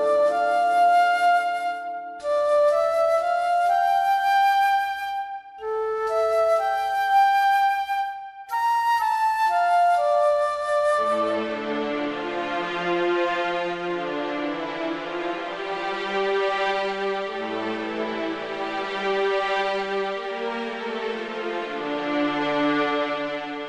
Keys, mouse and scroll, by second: 0.8 click, 2.4 click, 3.3 click, 5.1 click, 6.0 click, 7.4 click, 8.6 click, 9.0 KP_1, 10.0 click, 11.1 ctrl+z, 11.6 click, 12.4 click, 14.4 ctrl+r, 16.9 a, 17.4 click, 18.3 click, 19.2 shift+click, 19.8 click, 20.5 shift+click, 21.7 click, 23.3 click.